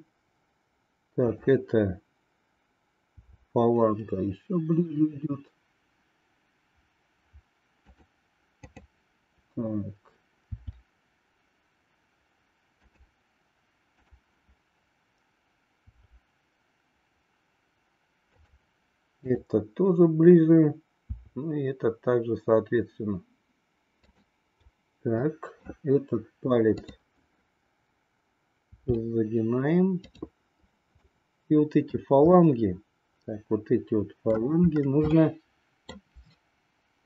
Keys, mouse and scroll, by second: 1.2-2.6 drag, 3.1 r, 8.7-10.0 drag, 10.5 r, 14.0-15.4 drag, 15.7 r, 19.4-20.5 drag, 21.1 r, 25.1 middle click, 26.7-28.2 drag, 28.7 r, 31.1 middle click, 32.3-34.4 middle drag, 35.2 middle click.